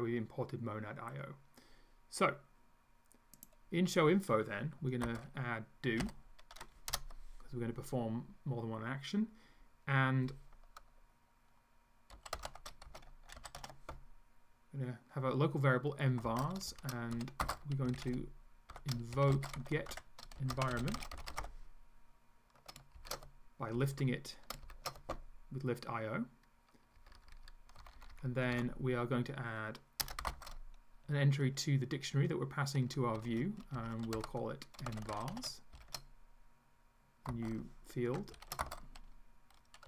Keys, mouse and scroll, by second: 3.4 click, 5.1-6.5 typing, 7.0 Return, 11.9-14.1 typing, 16.3-22.1 typing, 23.0 ctrl+shift+Left, 23.8 Left, 24.7 ctrl+shift+Left, 27.0 Left, 27.8 Down, 28.6 End, 30.0 Return, 30.3 ,, 30.4 space, 33.2-36.3 typing, 37.3-39.8 typing.